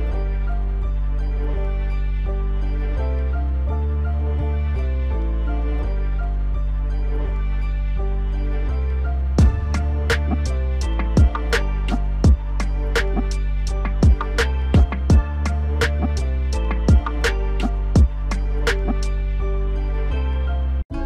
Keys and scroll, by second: 12.7 alt+w.